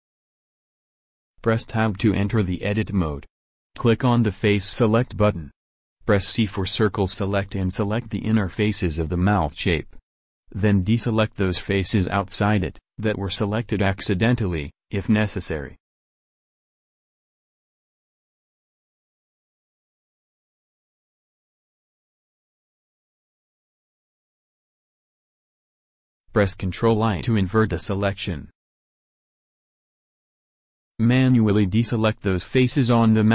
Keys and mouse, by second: 1.3 middle click, 2.1 Tab, 2.7 middle click, 3.8 a, 4.8 middle click, 5.0 middle click, 7.5 click, 8.3 c, 26.1 ctrl+i, 31.0 c.